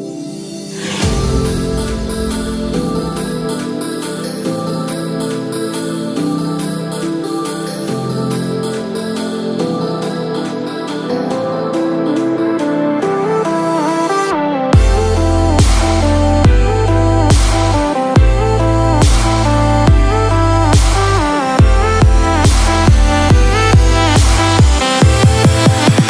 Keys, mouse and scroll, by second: 0.1 scroll down 1, 0.4 middle click, 0.9-1.7 scroll up 7, 1.3 middle click, 2.0-2.9 scroll down 4, 2.4 middle click, 3.8 click, 4.4 scroll down 2, 4.9 middle click, 5.0-6.3 scroll up 14, 6.3 scroll down 2, 6.7 middle click, 7.2-7.6 scroll down 1, 7.9 scroll down 1, 9.0 click, 9.8 click, 10.4 middle click, 11.0 Tab, 11.7 middle click, 12.8 click, 14.3 middle click, 16.3 middle click, 17.7 e, 23.5 middle click, 25.4 Tab, 25.8-26.0 scroll down 2.